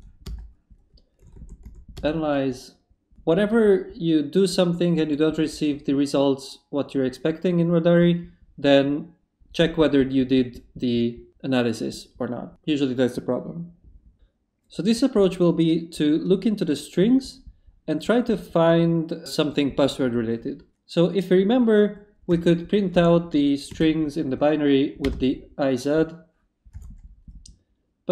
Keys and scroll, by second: 0.2 Return, 1.2 a, 1.9 Return, 22.3 i, 22.9 BackSpace, 23.7 z, 25.0 Return, 26.7 y.